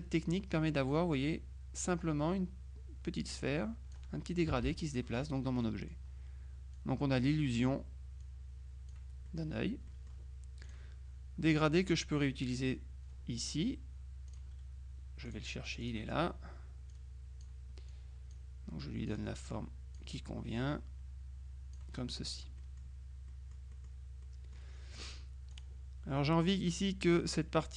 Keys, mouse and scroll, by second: 1.0-4.5 drag, 4.6 KP_Subtract, 5.7 middle click, 6.8 click, 8.3-9.9 drag, 9.3 middle click, 10.7 click, 11.6 click, 14.4 click, 15.4 click, 17.0 click, 19.2 click, 20.7-22.3 drag, 22.7-24.4 drag, 25.6 click.